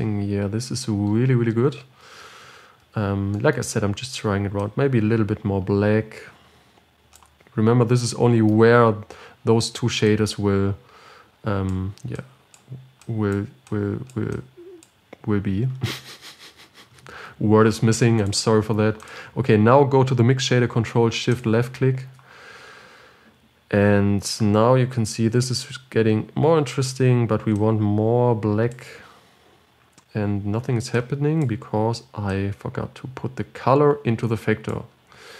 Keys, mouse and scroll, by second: 0.6-1.4 scroll down 6, 1.4-2.3 scroll up 7, 5.1-18.6 drag, 19.3-22.5 drag, 25.4-25.9 scroll down 4, 25.9-28.6 scroll up 4.